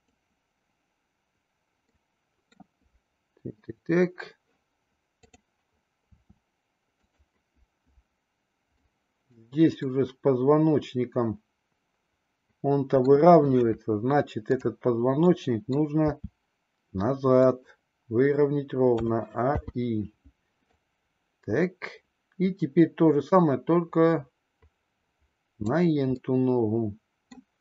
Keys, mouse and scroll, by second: 1.9-2.6 middle drag, 5.3 click, 5.9 r, 8.8-9.4 middle drag, 9.8-13.1 middle drag, 14.4-15.0 drag, 15.2-15.9 middle drag, 16.1 r, 18.9 a, 19.5 i, 20.8-25.6 drag, 26.2-27.3 middle drag.